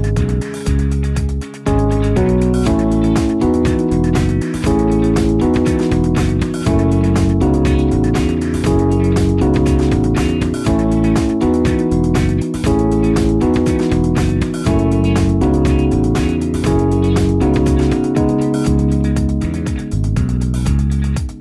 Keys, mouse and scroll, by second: 1.4 space, 11.7 Delete, 13.2 0, 18.5 space.